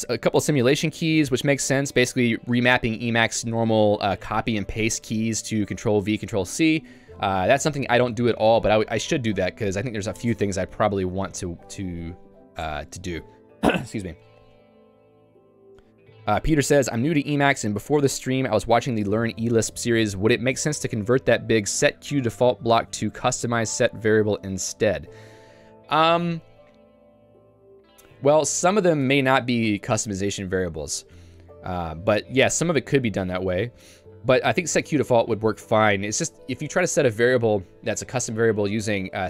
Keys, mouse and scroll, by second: 0.3-2.3 typing, 5.2-6.3 l, 7.0 Escape, 7.3 j, 14.9 Escape, 15.4 j, 29.0 click, 29.1 Escape, 30.0 ctrl+u, 30.5 ctrl+u, 32.6-34.6 typing.